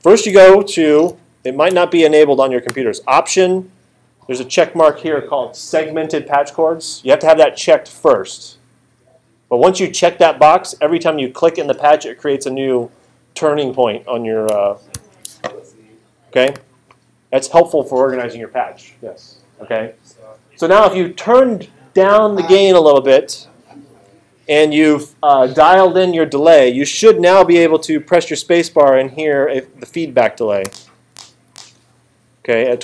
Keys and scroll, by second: 1.1 alt+super+8, 14.9 alt+super+8, 30.7 space.